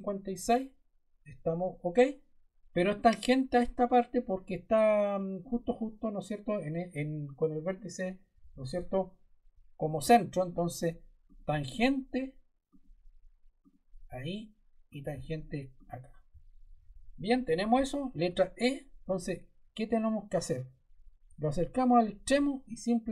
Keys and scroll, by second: 18.1 e.